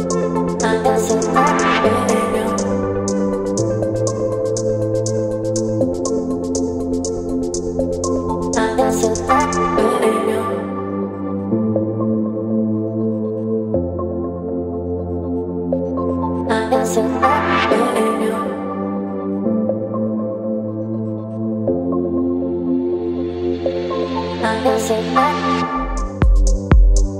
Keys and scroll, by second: 2.6 Return.